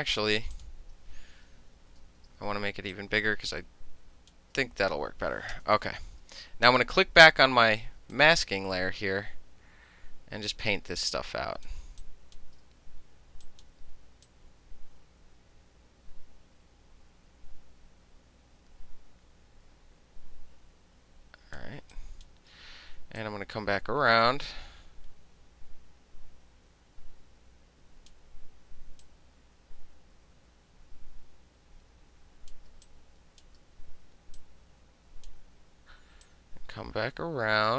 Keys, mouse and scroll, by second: 0.6 click, 1.8 ctrl+t, 3.0-4.4 drag, 5.6 KP_Enter, 6.7 click, 8.2-11.7 drag, 11.8 space, 12.0 click, 13.5 click, 14.3-21.6 drag, 21.8 space, 22.0 click, 22.3 middle click, 23.2-28.1 drag, 28.1 middle click, 29.1-32.6 drag, 32.6 middle click, 32.7 space, 32.9 click, 33.5 middle click, 34.4 click, 35.3-36.3 middle drag, 36.3-37.7 drag.